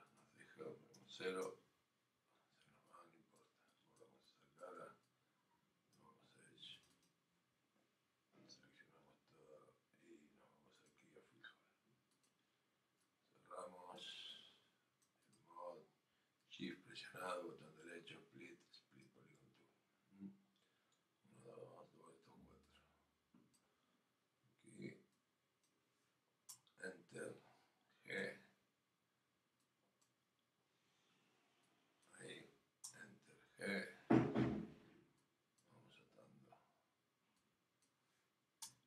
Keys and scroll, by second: 1.4 Return, 26.5 Return, 32.8 Return, 38.6 Return.